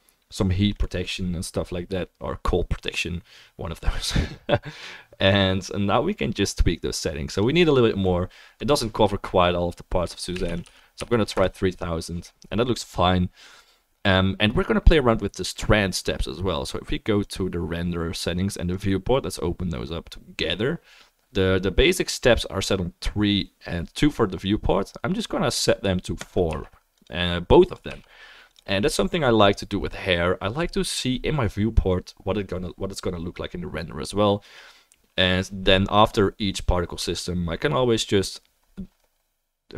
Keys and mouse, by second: 10.6 0, 27.0-39.7 middle drag, 27.0-39.7 right drag, 27.8 click.